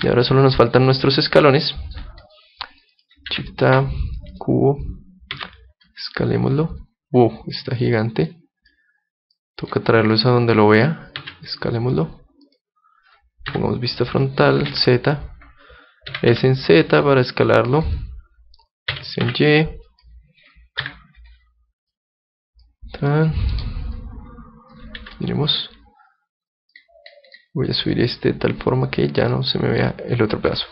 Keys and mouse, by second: 0.0 Escape, 0.7 middle click, 1.6-3.3 middle drag, 2.2-4.8 drag, 3.3 shift+a, 5.3 s, 7.8-12.1 drag, 11.2 s, 12.6-14.4 drag, 13.5 KP_3, 14.7 z, 16.1 s, 18.0-19.8 drag, 18.9 s, 20.1-21.8 drag, 20.8 KP_1, 21.9-23.8 drag, 23.1 middle click, 24.0-25.8 drag, 25.0 z, 25.8-26.8 middle drag, 26.8-29.5 drag, 29.3-30.7 middle drag.